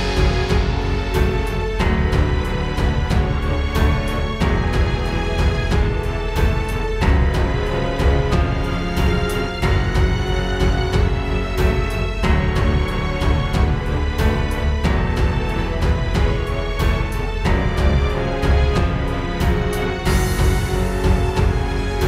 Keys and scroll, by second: 3.5 space, 4.0 super+space, 4.1 super+space, 8.1 super+z.